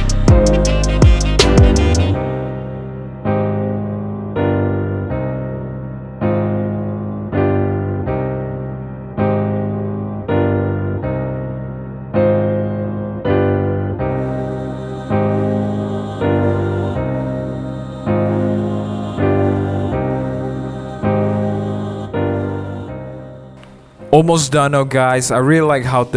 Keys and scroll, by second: 0.0 super+-, 0.2 super+0, 0.8 super+z, 1.5 t, 1.8 super+v, 7.8-10.4 typing, 10.6 super+t, 10.8 Return, 10.9 super+t, 11.4 Return, 11.9 Return, 12.6 super+0, 12.6 super+-, 12.8 super+-, 15.1 super+-, 15.5 super+0, 15.6 super+-, 15.7 super+=, 15.8 super+=, 16.9 space, 17.2 BackSpace, 17.3 Return, 18.3-20.6 typing, 20.7 Return, 22.6-23.4 typing, 23.5 shift+super+5, 25.6-26.1 typing.